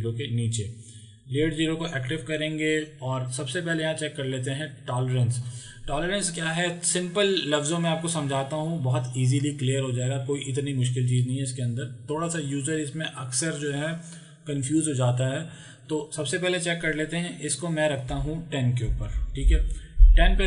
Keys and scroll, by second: 18.9 KP_1, 19.1 KP_0, 19.4 Return.